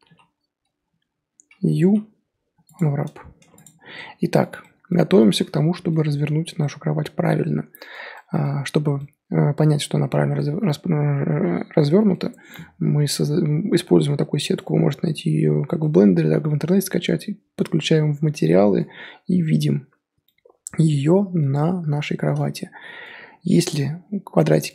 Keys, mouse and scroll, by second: 0.0 a, 2.8 u, 3.4 Tab, 3.5 click, 3.8 scroll down 1, 3.8 scroll up 1, 3.9 scroll down 1, 3.9-6.1 middle drag, 6.1-6.6 scroll up 1, 6.6-10.6 middle drag, 10.6-11.3 scroll up 2, 11.3 scroll up 1, 11.5-11.8 scroll down 4, 11.8 middle click, 12.1-12.6 scroll up 1, 15.8-19.4 middle drag, 19.4 scroll down 1, 19.5 scroll up 1, 20.2-23.9 middle drag, 23.9-24.4 scroll up 3, 24.5-24.7 middle drag.